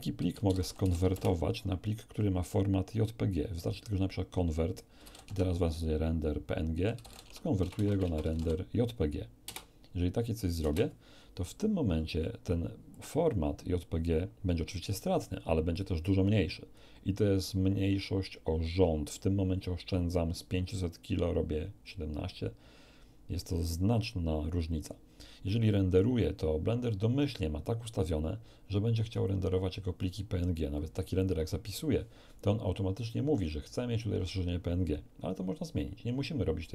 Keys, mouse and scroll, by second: 0.2-1.1 typing, 5.0 r, 5.1 e, 5.1 n, 5.2 Tab, 7.2 Tab, 7.2-8.3 typing, 9.4 Return, 10.6 Return, 10.6 l, 12.9 click, 15.7 click, 29.1 click, 31.3 F3.